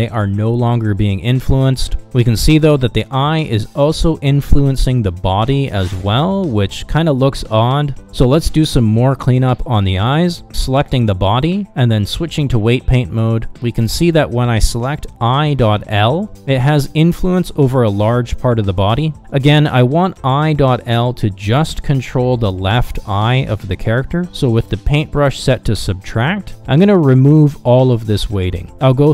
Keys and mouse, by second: 0.3 ctrl+Tab, 1.6 r, 5.3 ctrl+z, 6.3 ctrl+z, 12.3 ctrl+Tab, 19.9 KP_Divide, 21.9 shift+middle click, 26.0 f, 27.2-29.1 drag.